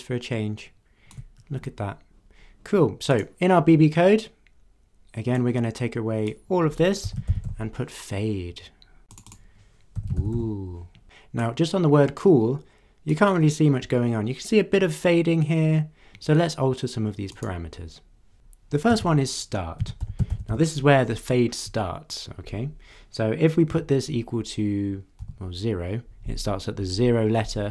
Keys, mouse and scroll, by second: 3.1 click, 3.6-4.0 scroll down 2, 5.4-6.5 drag, 6.8-7.9 typing, 9.1 click, 9.7-10.8 typing, 11.3-13.3 drag, 17.3 click, 18.9-20.9 typing, 23.6 =, 25.2 0.